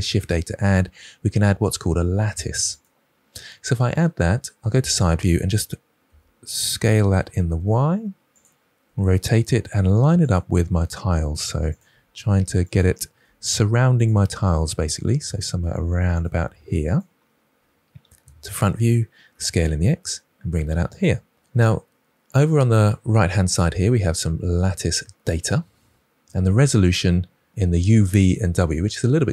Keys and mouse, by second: 0.0 shift+a, 4.6 KP_3, 6.0 s, 7.5 y, 8.3 click, 8.8 r, 10.2 click, 10.9 s, 11.6 click, 11.8 g, 12.6 click, 13.2 r, 13.9 click, 14.1 s, 16.3 g, 16.8 click, 18.2 KP_1, 19.2 s, 19.6 x, 20.8 click, 24.6 click.